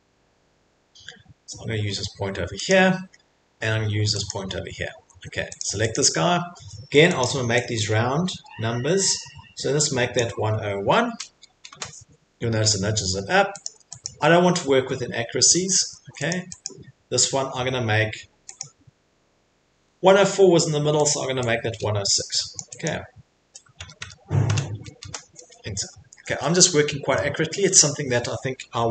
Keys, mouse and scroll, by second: 0.6 middle click, 0.6 middle click, 2.7 click, 4.3 click, 5.0 Escape, 5.2 Escape, 5.6 click, 5.9 click, 7.2 click, 10.1 click, 11.1-11.7 typing, 13.6 click, 14.0 click, 15.7 Escape, 16.0 Escape, 16.3 click, 16.6 click, 18.6 click, 21.1 click, 22.8 click, 23.8 BackSpace, 24.0 BackSpace, 24.5 BackSpace, 25.0 Return, 25.8 scroll, 26.1 Escape, 26.3 Escape, 26.5 middle click, 27.2 middle click.